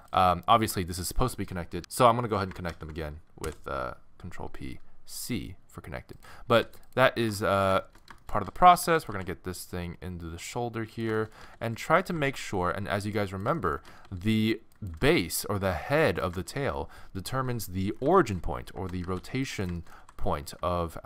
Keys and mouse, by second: 0.5-1.8 drag, 2.7 ctrl+p, 6.1-8.6 middle drag, 6.6 a, 7.2 g, 8.5 a, 8.6 a, 8.8 a, 9.0-10.4 middle drag, 9.1 g, 11.3 middle click, 11.4 a, 11.6 a, 12.0-13.5 drag, 12.1 g, 13.5 right click, 13.6 middle click, 13.9 a, 14.0 a, 14.9 g, 16.5 click, 16.7 a, 16.9 a, 18.2 middle click, 19.0 a, 19.2 c, 20.0 g.